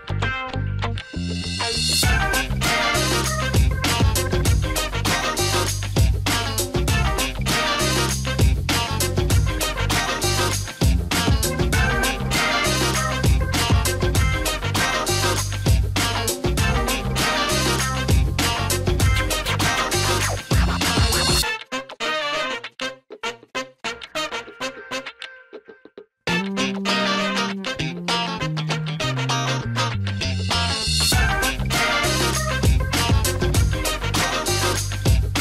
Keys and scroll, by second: 0.0-3.3 typing, 0.7 Down, 9.5-10.3 typing, 11.5 Return, 13.1 Down, 13.3 Down, 13.5 Down, 13.7 Down, 13.9-15.7 Down, 15.8 Up, 16.5-18.2 Up, 18.3-18.7 typing, 19.2 Down, 19.4 Down, 19.8-20.5 typing, 22.1 Return, 34.9 typing.